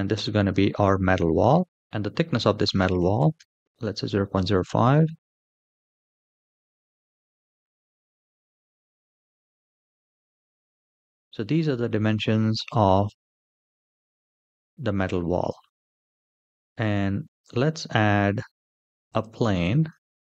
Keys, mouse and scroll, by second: 1.2 click, 1.7-3.1 drag, 3.5-5.8 drag, 6.8 Tab, 6.8 middle click, 6.8-7.3 scroll up 3, 7.3 click, 8.4 g, 13.1 Tab, 13.7-15.2 middle drag, 15.5 shift+middle drag, 16.1 middle click, 17.1 shift+a, 19.4 shift+middle click.